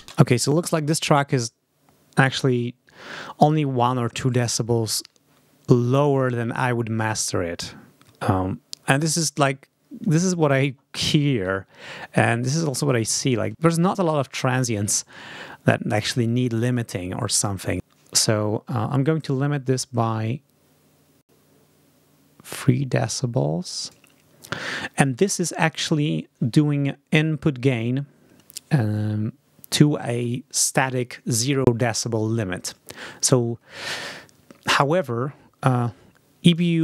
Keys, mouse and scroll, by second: 0.0 space, 12.1-13.1 ctrl+scroll up 4, 13.9 ctrl+scroll down 2, 17.6 ctrl+scroll down 2, 19.1-23.9 drag, 36.3 click.